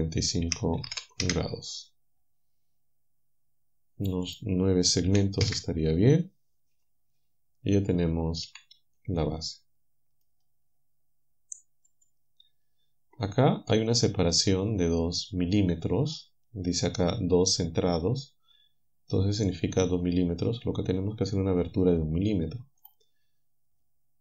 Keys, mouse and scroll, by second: 0.5 KP_Subtract, 0.9 KP_4, 0.9 KP_5, 1.2 Return, 5.1 9, 5.5 Return, 8.5 a, 9.2-10.4 drag, 11.9 click.